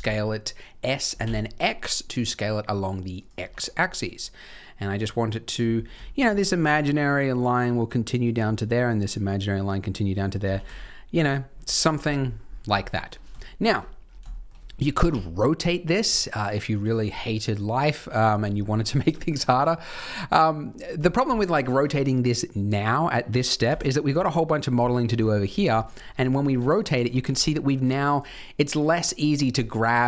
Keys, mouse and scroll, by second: 3.3 g, 5.7 scroll up 3, 6.0 shift+middle click, 10.4 s, 11.5 g, 12.2-12.5 scroll down 8, 12.7 shift+middle click, 13.0 shift+scroll down 3, 13.4 shift+middle click, 13.6-14.1 shift+scroll down 4, 14.2 shift+middle click, 15.0 r, 23.6 KP_3, 24.8 shift+middle click, 25.3-25.6 scroll up 1, 25.7 shift+middle click, 26.1-26.6 scroll up 2, 26.5 Tab, 26.9 shift+middle click, 27.1-27.4 scroll up 7, 28.0 click, 28.7 click, 29.9 click.